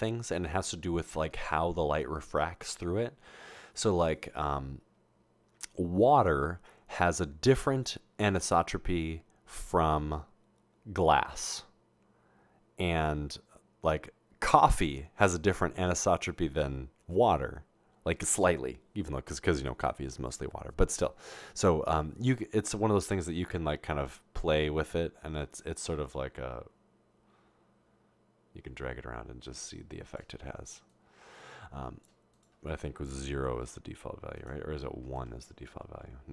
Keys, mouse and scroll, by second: 22.3-30.2 drag, 30.9-32.1 drag, 32.4 click, 34.4 click, 35.8 1.